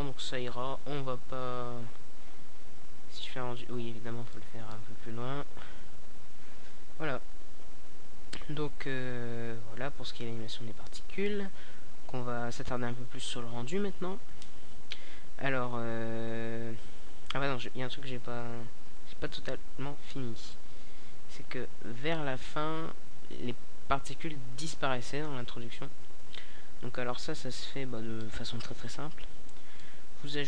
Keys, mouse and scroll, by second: 0.0 Escape, 10.1 click, 16.5-18.4 drag, 19.3-20.8 drag, 20.8 shift+a, 24.7 typing, 25.9-28.0 typing, 26.1-27.9 drag, 28.7-30.3 drag.